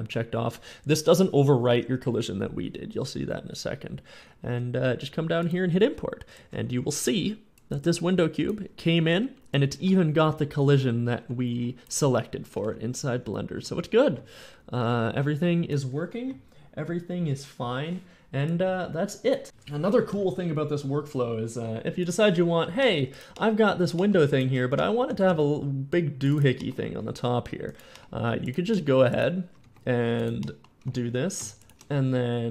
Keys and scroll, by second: 6.3 a, 9.6-15.0 typing, 18.5 a, 24.3 Tab, 24.6 Tab, 24.9 a, 25.3 ctrl+r, 29.5 e, 29.7 e, 30.7 Tab, 30.8 Tab.